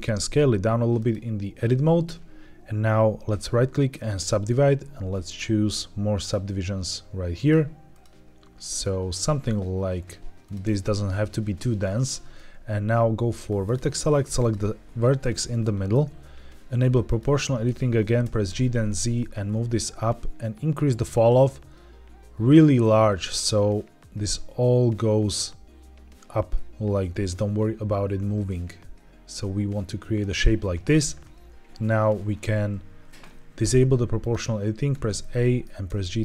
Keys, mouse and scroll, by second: 0.9 click, 3.2-4.2 right drag, 5.2 click, 6.1 click, 7.3 click, 7.8 click, 8.5 click, 10.3 click, 13.5 click, 14.3 click, 15.1 middle click, 17.0 click, 18.1 g, 18.4 z, 19.4-20.0 scroll down 5, 21.1-21.4 scroll down 3, 23.5-24.2 scroll down 2, 30.1 click, 34.1 click, 34.8 a, 35.1 middle click, 35.8 g, 35.9 z.